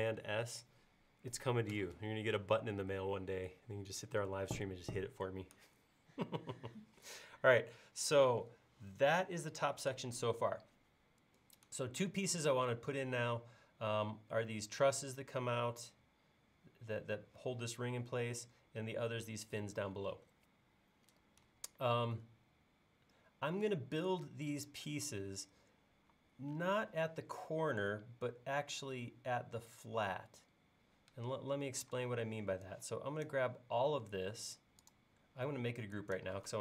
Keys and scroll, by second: 26.2 i, 32.0 space.